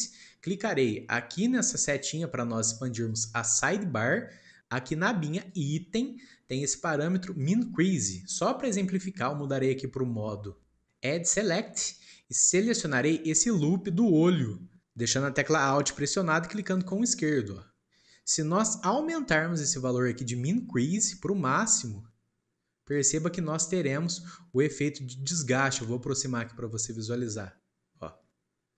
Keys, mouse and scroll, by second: 3.0-4.6 drag, 5.4 click, 11.4-13.4 drag, 16.7 alt+click, 20.9-23.6 drag, 23.6 scroll up 1, 24.7 scroll up 3, 24.7-27.8 shift+middle drag.